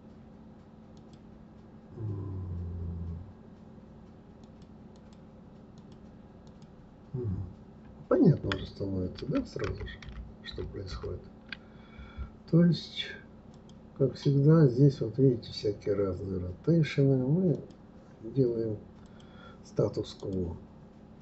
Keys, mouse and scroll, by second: 4.4 click, 4.9 click, 5.8 click, 6.5 click, 9.2 ctrl+z, 9.6 ctrl+z, 13.5 click, 17.5 click, 19.0 click, 20.2 click.